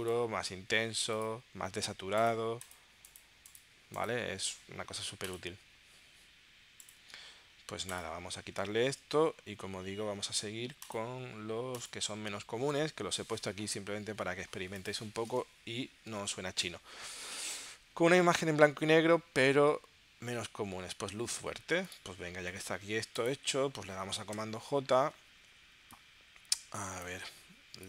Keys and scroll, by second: 8.9 super+Tab, 15.3 space, 16.1 space, 24.3 super+j.